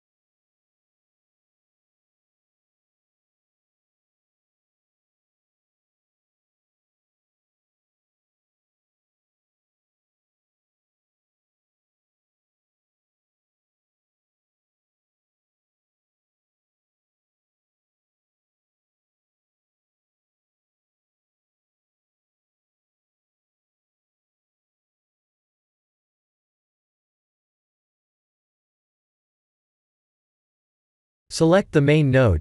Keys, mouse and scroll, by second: 1.2 g, 4.0 middle click, 4.9 shift+middle click, 5.4 middle click, 6.7 shift+a, 7.7 s, 10.0 s, 11.4 ctrl+alt+KP_0, 12.1 shift+`, 20.6 shift+`, 26.4 click, 28.2 click, 29.5 click, 31.1 click, 31.9 ctrl+z, 31.9 ctrl+shift+t, 31.9 click.